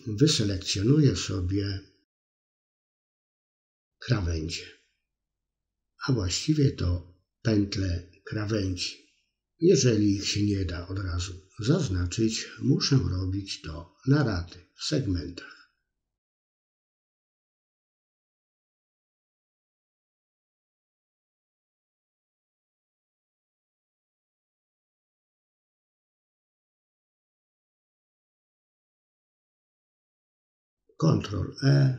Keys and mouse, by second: 0.6 middle click, 1.3-3.3 middle drag, 4.2 shift+click, 4.8 middle click, 6.0 shift+click, 6.5 middle click, 7.4 middle click, 11.9 middle click, 12.6 middle click, 14.2 middle click, 15.2-16.6 middle drag, 17.0 click, 17.6 middle click, 18.5 middle click, 19.6 middle click, 20.5 middle click, 21.2 alt+shift+click, 23.3 alt+shift+click, 23.7 middle click, 25.1 alt+shift+click, 25.6 middle click, 26.0 middle click, 26.5 alt+shift+click, 26.9 middle click, 27.5 middle click, 27.7-28.9 middle drag, 29.4 ctrl+e, 31.1 middle click.